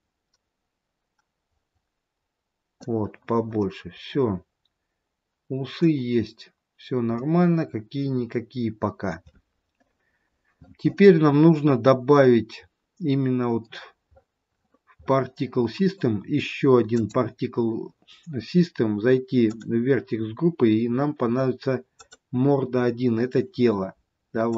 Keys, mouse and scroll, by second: 3.7 middle click, 6.4 scroll down 2, 7.3 middle click, 13.7-16.9 scroll up 20, 16.9 click, 19.5 click.